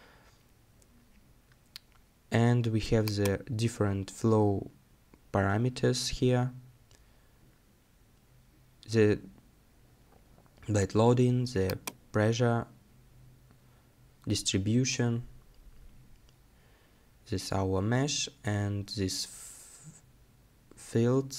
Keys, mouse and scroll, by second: 9.2-14.2 scroll down 1.